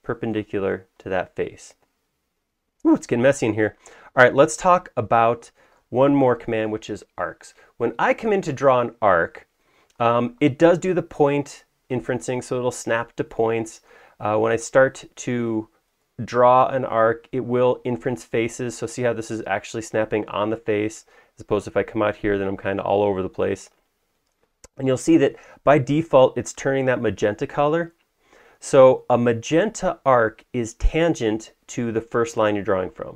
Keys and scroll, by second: 4.3 space.